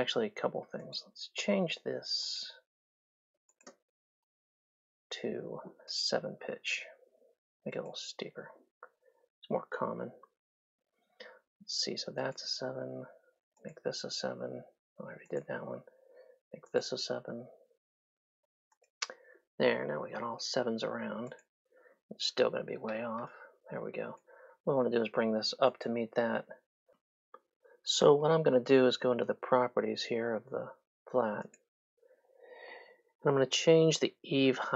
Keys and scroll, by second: 3.4 space, 9.0 KP_7, 10.0 Return, 19.8 KP_7, 20.1 Return, 23.0 3, 24.7 Escape, 27.2 `.